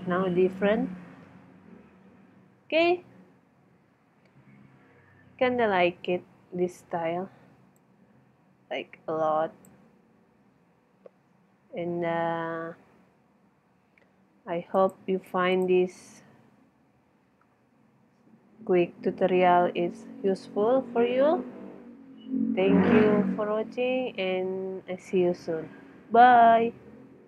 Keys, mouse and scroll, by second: 5.0 Escape, 6.1 KP_0, 11.3-14.7 middle drag.